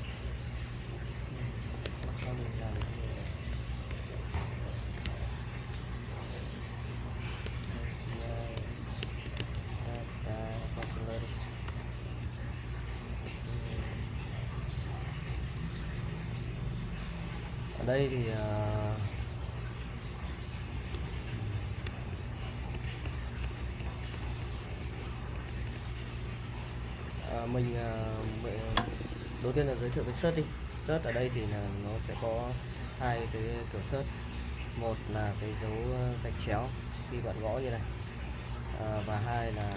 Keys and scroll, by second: 0.0-0.1 typing, 3.8-5.5 typing, 6.9-9.6 typing, 10.8 Return, 11.7 h, 12.2 j, 13.7 ctrl+f, 18.4-19.1 typing, 21.5-28.3 typing, 36.5 /, 39.5 BackSpace.